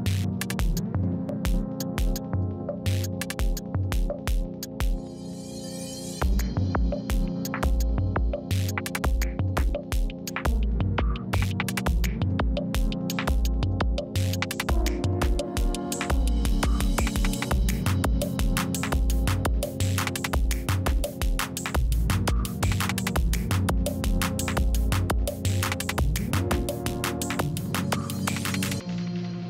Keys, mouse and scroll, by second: 0.8-1.4 shift+scroll up 3, 1.4 scroll down 1, 7.0-21.6 drag, 22.4-23.0 scroll down 1, 23.0-24.6 scroll up 1, 27.5-29.1 drag, 29.1 right click.